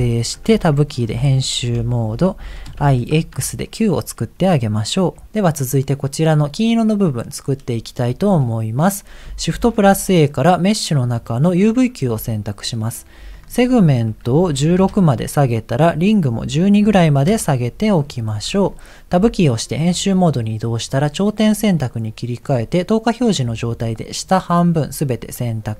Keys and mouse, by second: 0.3 Tab, 1.4 BackSpace, 1.7 BackSpace, 2.9 shift+x, 3.5 Tab, 5.2 g, 9.5 shift+a, 13.4-15.0 drag, 15.8-17.3 drag, 19.2 Tab, 20.9 click, 22.5 click, 23.6 click, 24.5-25.6 middle drag.